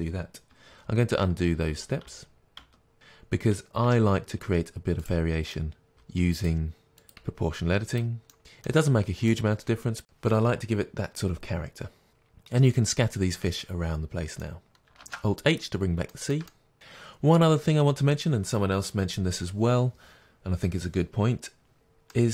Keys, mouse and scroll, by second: 0.7 ctrl+z, 2.9 ctrl+shift+z, 3.9 Tab, 5.1 click, 5.6-7.1 middle drag, 6.5 g, 7.1 click, 7.3 g, 7.6 click, 7.8-9.0 middle drag, 8.4 Tab, 8.7 Tab, 8.9 scroll up 2, 9.0 click, 9.1 shift+click, 9.2 g, 9.4 click, 9.7 g, 10.2 click, 10.3 g, 10.5 Tab, 10.5-22.3 middle drag, 11.2 scroll down 1, 13.4-14.5 scroll down 2, 15.2 alt+h, 15.8-16.1 scroll down 1.